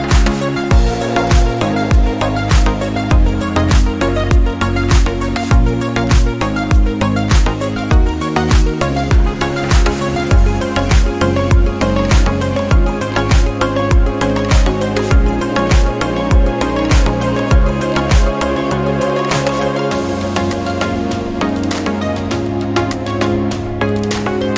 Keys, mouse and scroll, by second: 3.3-11.2 drag, 18.7 click.